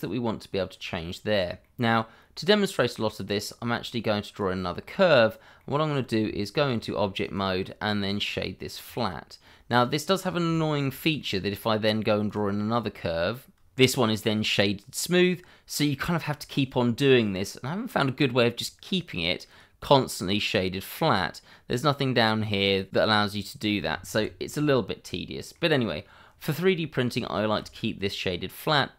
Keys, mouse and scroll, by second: 1.6 middle click, 3.4 click, 5.2-5.6 scroll up 1, 5.6 middle click, 6.2 Tab, 7.2 right click, 8.8 click, 9.4 middle click, 10.2 scroll down 1, 10.5 shift+middle click, 11.5 click, 12.8 click, 13.5 scroll up 1, 13.8 middle click, 19.5 click, 23.3 click, 24.1 ctrl+z, 24.7 scroll down 1, 25.0 middle click, 27.2 shift+middle click.